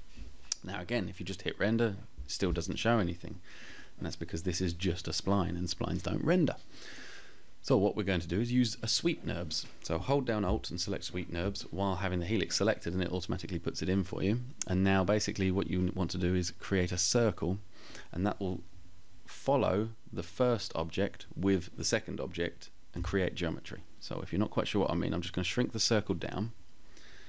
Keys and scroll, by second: 22.1 t, 26.4 space.